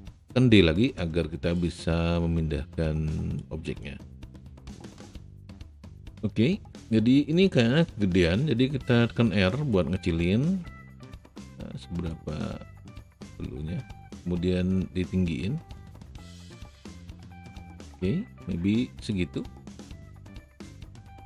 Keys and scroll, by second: 0.6 d, 9.2 r.